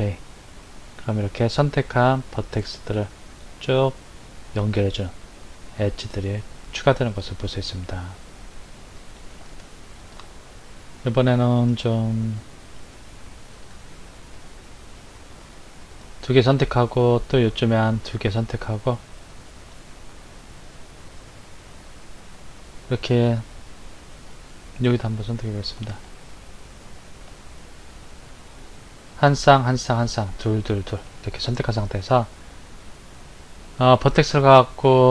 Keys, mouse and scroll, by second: 10.5-14.3 middle drag, 14.3 click, 15.5 shift+click, 17.7 shift+click, 19.2 shift+click, 25.9 shift+click, 27.0 shift+click, 33.6-35.1 drag.